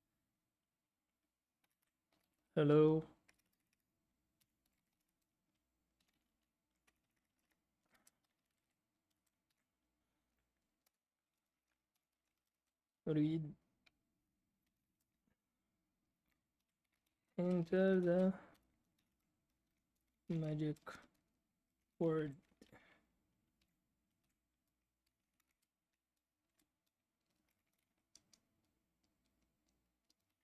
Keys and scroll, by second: 1.3-9.1 typing, 10.8 Return, 10.8-12.8 typing, 14.4-15.1 typing, 16.3-24.1 typing, 25.2-28.3 typing.